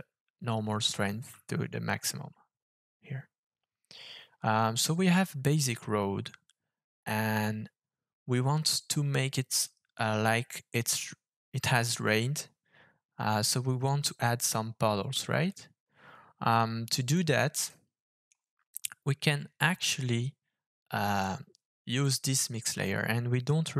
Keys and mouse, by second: 15.6-17.3 drag, 17.6 middle click, 21.0-22.0 drag, 22.9 middle click.